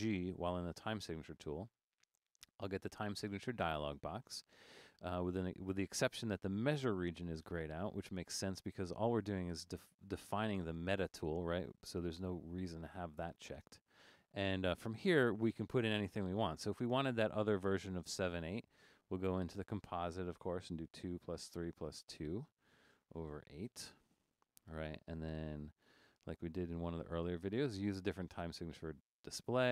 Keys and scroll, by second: 0.3 shift+g, 20.8 2, 21.6 3, 21.8 shift++, 22.1 2, 22.7 Tab, 23.7 8.